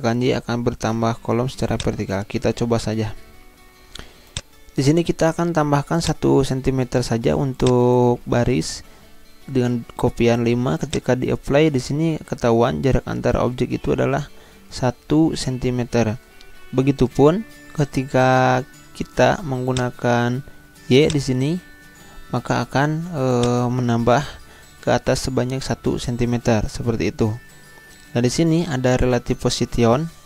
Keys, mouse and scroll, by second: 1.7-4.3 drag, 4.3-10.5 drag, 10.8 click, 17.0 ctrl+z, 19.8 click, 23.3 click, 25.9 ctrl+z.